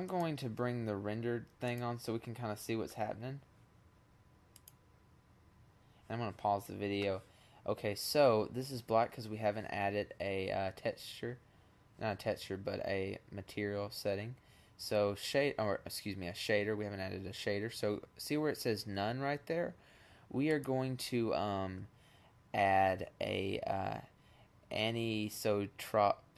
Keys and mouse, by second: 3.4-5.0 drag, 18.7-20.9 drag.